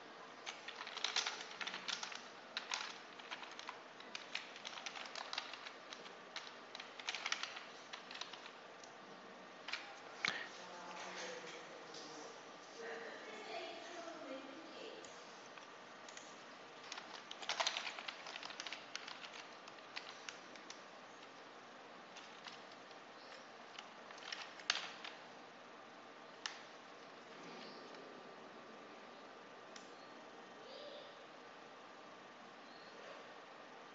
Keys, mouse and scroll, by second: 0.3-8.2 typing, 15.0 click, 16.0 click, 16.9-19.8 typing, 22.7 Left, 24.0 Delete, 24.2 3, 24.3 Right, 24.6 Delete, 24.7 3, 26.7 Left, 29.7-33.9 drag.